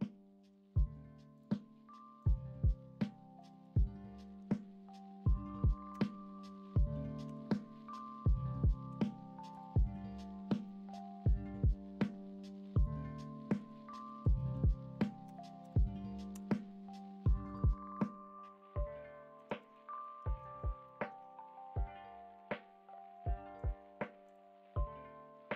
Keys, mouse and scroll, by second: 10.6-11.2 middle drag, 14.0 Right, 14.0-17.5 drag, 17.9-19.3 middle drag, 19.6 alt+z, 20.2 alt+z, 20.8 middle drag, 21.1 Tab.